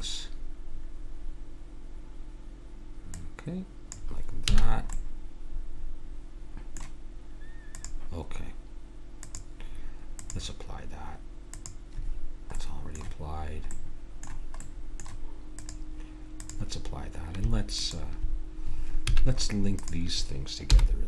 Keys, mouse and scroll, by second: 0.0 KP_1, 1.7 click, 4.4 a, 5.5-6.7 middle drag, 7.7 click, 12.6 middle click, 14.2-15.5 middle drag, 15.5-19.9 drag, 19.0 a, 20.7 h.